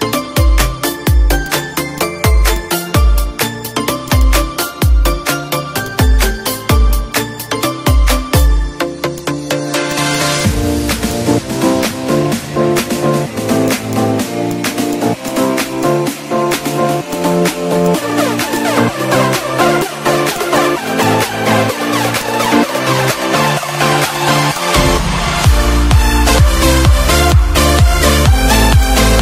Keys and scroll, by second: 3.0 Down, 3.7 ctrl+z, 5.1 Down, 6.0 space, 6.4 b, 6.9 space, 12.3 d, 20.7 ctrl+d, 25.1 ctrl+shift+=, 25.7 Page_Down, 28.3 d.